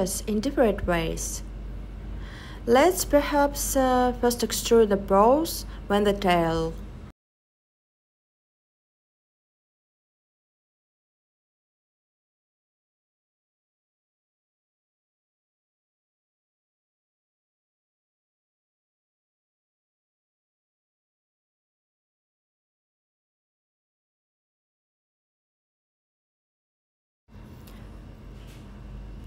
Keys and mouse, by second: 4.2 click, 15.4 click, 25.8 e, 29.1 s.